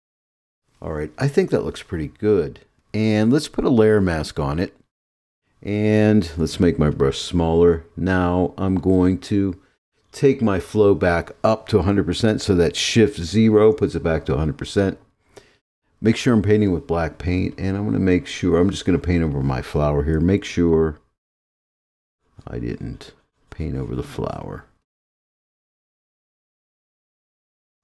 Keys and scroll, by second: 13.4 shift+0.